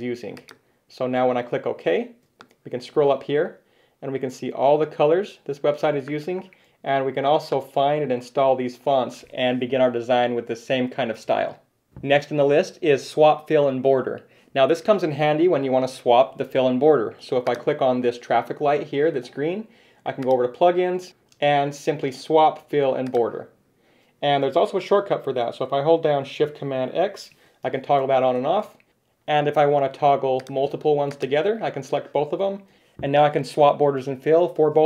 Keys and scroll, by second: 27.3 shift+super+x, 32.7 shift+super+x.